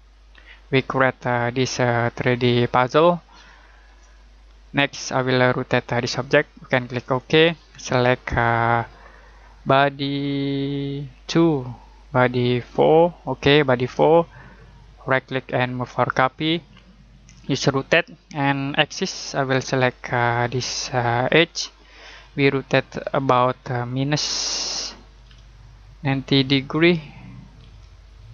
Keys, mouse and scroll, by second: 4.1 middle click, 7.0 click, 15.1 right click, 16.1 click, 18.9 click, 25.2 -, 27.2-28.1 typing.